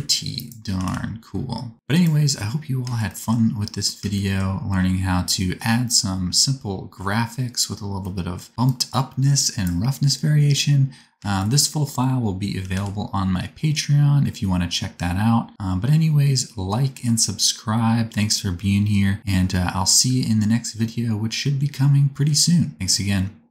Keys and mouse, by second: 0.1 click, 0.7 r, 4.1-8.6 shift+middle drag, 8.6-14.4 drag, 12.6 r, 17.5-23.5 drag.